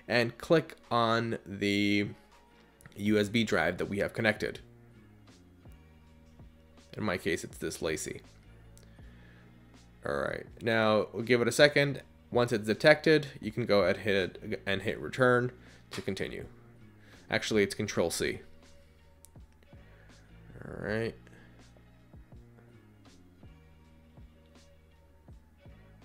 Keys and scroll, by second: 24.6 ctrl+c.